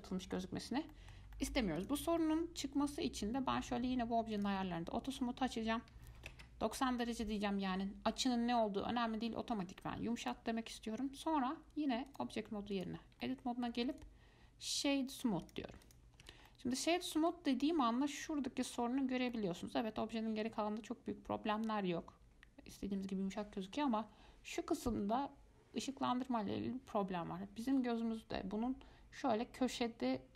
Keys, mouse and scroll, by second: 0.7-1.1 scroll down 1, 1.1-2.0 shift+middle drag, 2.0 click, 2.4-4.6 shift+middle drag, 4.6 click, 5.3-8.3 drag, 10.4 click, 12.3-13.4 drag, 13.4 middle click, 14.1-16.0 right drag, 16.0 click, 16.4 Tab, 16.7-22.5 middle drag.